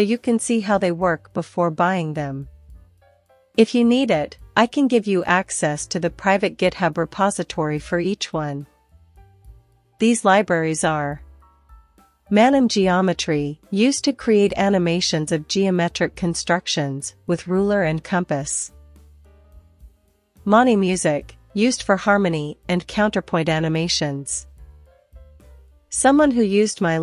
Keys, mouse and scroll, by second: 0.4 click, 0.6 click, 0.8 click, 1.6 click, 1.9 typing, 2.7 click, 3.1 click, 3.9 click, 7.9-11.4 typing.